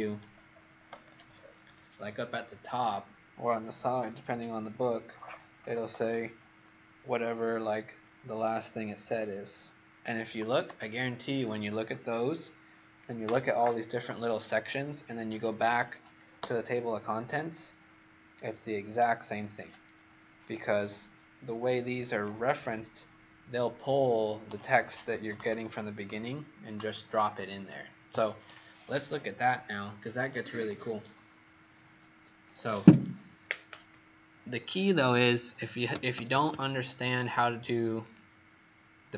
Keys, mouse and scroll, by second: 35.8 Escape, 36.0 Escape, 37.9 click.